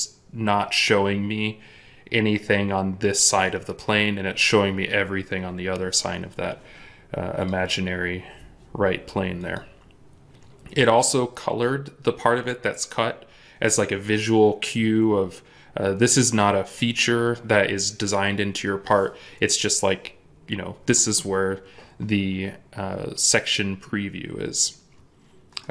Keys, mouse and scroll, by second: 25.5 middle click.